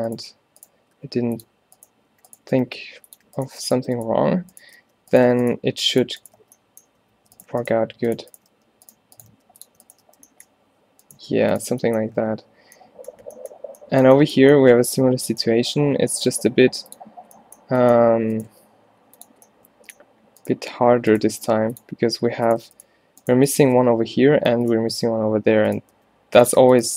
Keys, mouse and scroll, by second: 1.0 g, 2.6 e, 4.9 f, 6.5 f, 7.0 a, 8.7 f, 9.4 g, 10.1 f, 12.2 a, 16.7 g, 19.1 g, 21.3 g, 23.8 f, 26.0 g.